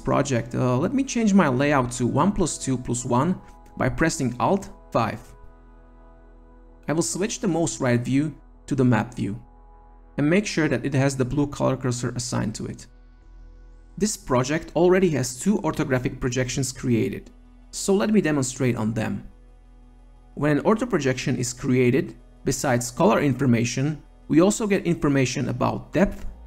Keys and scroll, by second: 3.5 alt+5.